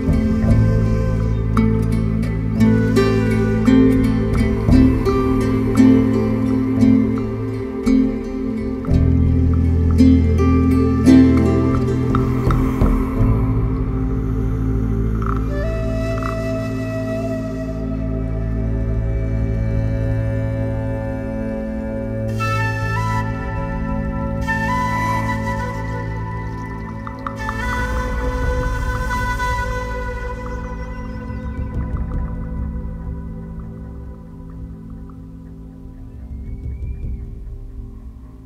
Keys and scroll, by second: 1.5 0, 4.9 1, 8.3 b, 8.5 e, 8.6 Return, 9.5 BackSpace, 12.4 4, 13.8 7, 21.3 ctrl+z, 31.3 4, 32.2 3, 33.3 4, 34.0 7.